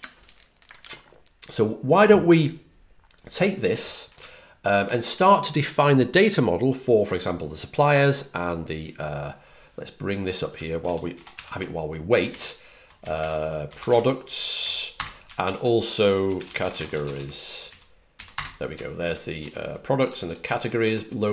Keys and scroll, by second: 10.7 super+c, 11.0 super+t, 11.2 super+v, 12.2-15.0 typing, 16.4-18.7 typing, 19.3 super+2, 20.2 super+3, 20.7 super+1.